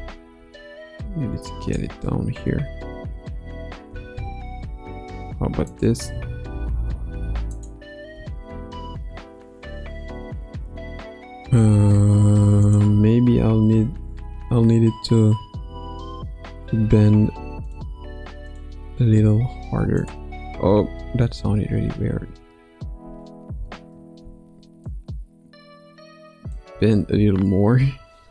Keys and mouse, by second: 0.3 s, 2.8 a, 3.8 i, 5.7 click, 6.1 space, 6.7 space, 7.5 click, 8.1 space, 8.6 space, 12.6 click, 15.3 Left, 16.6 r, 18.4 click, 18.9 r, 22.1 a, 23.5 i, 24.8-26.5 drag, 26.7 space, 27.8 space.